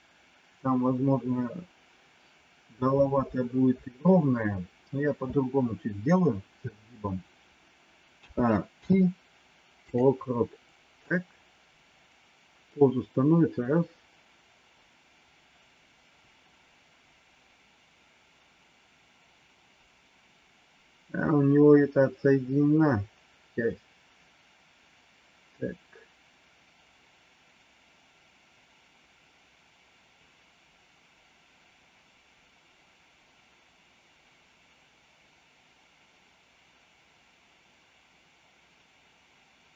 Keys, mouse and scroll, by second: 8.1 a, 8.7 i, 11.0-39.7 drag.